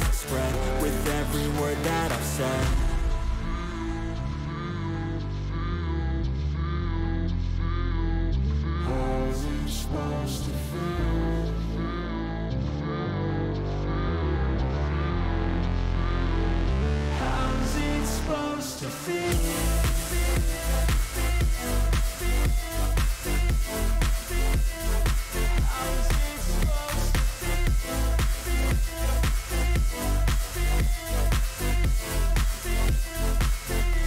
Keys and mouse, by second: 0.5 click, 0.9 shift+click, 3.7-5.1 drag, 9.8-11.3 drag, 15.3-16.4 drag, 17.4 click, 17.7 shift+click, 19.8-21.1 drag, 22.0 click, 24.1-25.4 drag, 26.6 click, 27.9 click, 28.8 shift+click, 31.0-32.1 drag.